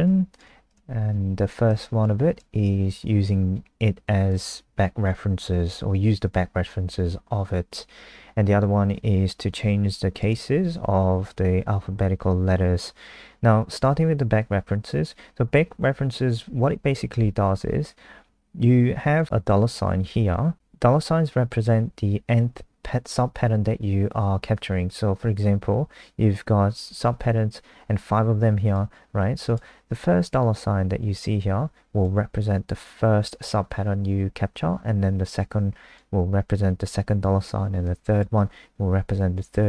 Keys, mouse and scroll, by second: 0.0 ctrl+c, 0.3 click, 0.8 shift+Home, 1.1 shift+Up, 1.2 shift+Up, 4.3 click, 4.4 click, 10.1 click, 11.2 Up, 11.4 Up, 11.5 Up, 19.2 click.